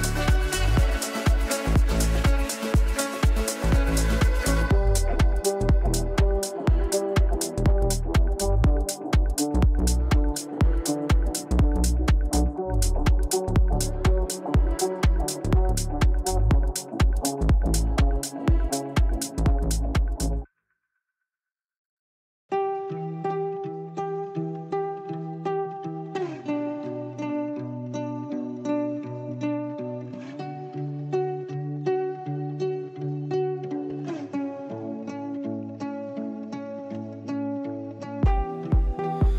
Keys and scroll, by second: 12.4 ctrl+q, 33.6 ctrl+q.